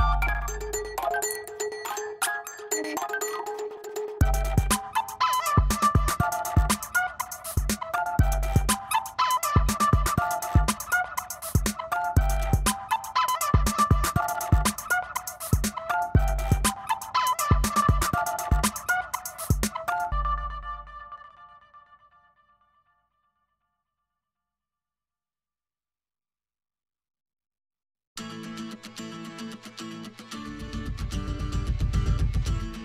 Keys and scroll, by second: 0.7 ctrl+alt+d, 0.9 5, 1.1 ctrl+x, 1.3 ctrl+v, 1.8 ctrl+t, 2.9 space, 5.4 Return, 6.9 space, 7.3 v, 10.5 space, 11.3 ], 15.6 ], 16.0 [, 16.8 ctrl+space, 17.6 space, 18.7 space, 19.4 space, 19.9 [, 20.2 [, 21.4 ], 24.3 ], 25.7 space, 28.0 space, 28.9 v, 29.5 ctrl+e, 29.9 o, 30.1 ], 31.2-32.8 typing.